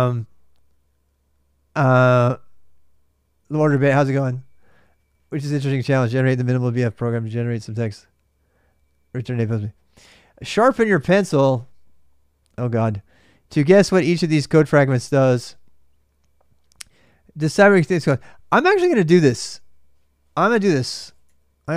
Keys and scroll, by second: 20.5-21.7 typing.